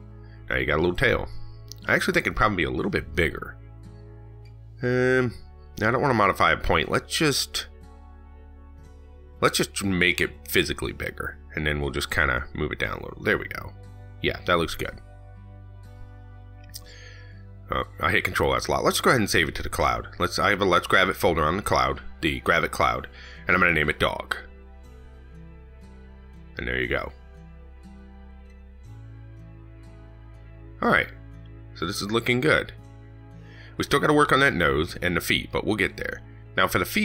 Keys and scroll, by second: 16.2 ctrl+s.